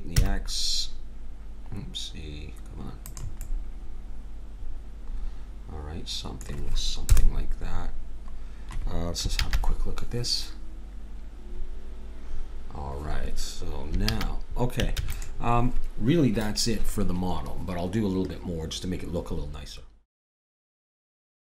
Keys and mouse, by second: 3.5-4.7 middle drag, 7.0 KP_0, 9.7 shift+z, 14.1 shift+z, 15.0 ctrl+s.